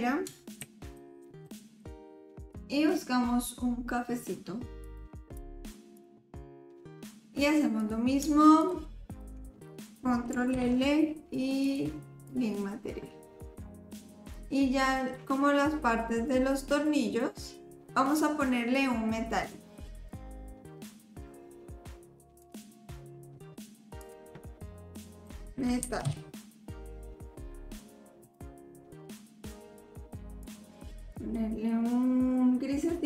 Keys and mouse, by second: 2.5 click, 6.0 click, 7.8 click, 9.0 shift+click, 10.5 ctrl+l, 12.2 click, 14.3 click, 20.9 click, 22.4 click, 24.0-27.8 drag, 28.2 click.